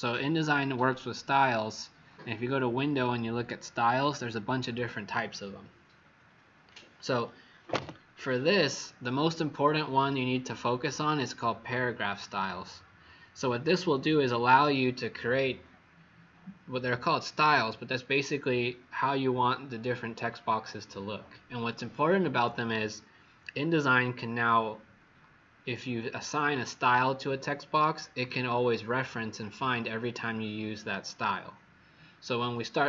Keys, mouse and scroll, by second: 1.3 click.